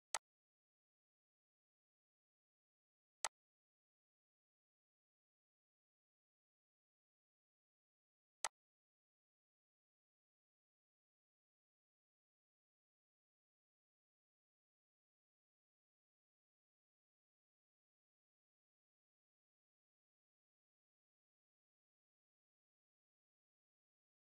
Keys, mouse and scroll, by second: 0.1-7.0 alt+shift+drag, 8.5-17.6 drag, 17.1 ctrl+Num_Lock, 17.6 ctrl+c, 23.8 ctrl+v.